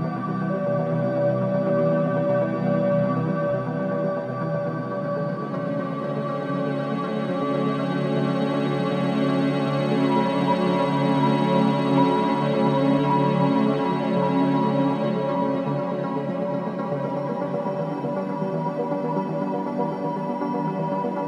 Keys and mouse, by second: 0.6-2.8 drag, 5.5 i, 5.7 click, 8.8 click, 11.5 click, 12.2 click, 12.6-13.6 shift+drag, 13.7 shift+click, 14.7-15.1 typing, 17.7-19.2 drag, 19.5-19.9 typing, 20.7 click.